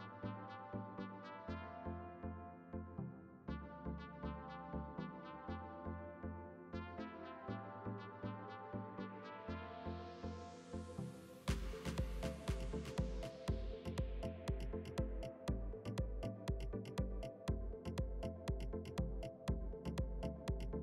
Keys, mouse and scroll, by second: 0.4 g, 1.5 s, 2.8 g, 4.8 KP_7, 5.7 g, 8.8-9.9 middle drag, 9.9 KP_1, 10.6-12.4 middle drag, 12.1 s, 13.7 g, 15.2-16.2 middle drag, 16.8 ctrl+r, 17.2 Tab, 17.8 ctrl+r, 20.0 ctrl+r.